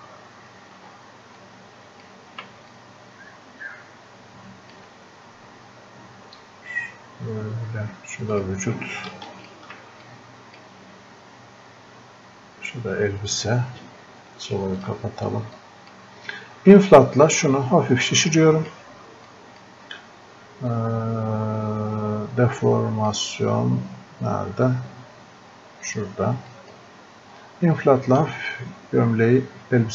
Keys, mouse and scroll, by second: 14.8 click, 25.9 click.